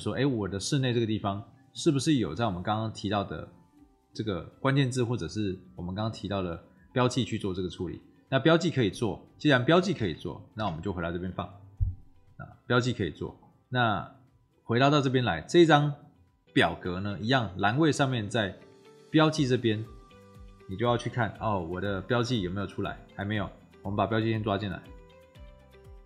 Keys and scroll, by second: 9.9 ctrl+c, 10.5 ctrl+v.